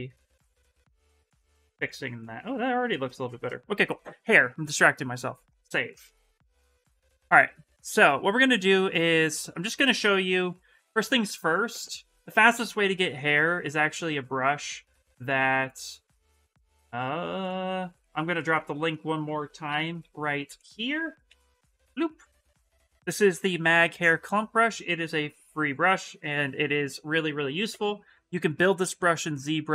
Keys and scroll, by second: 6.3 Return, 19.4 ctrl+c, 19.5 ctrl+c, 21.0 ctrl+v, 21.4 Return.